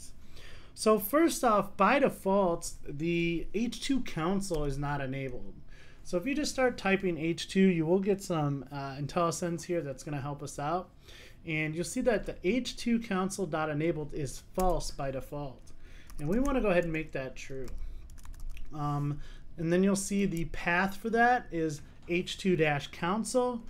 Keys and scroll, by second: 14.6 Return.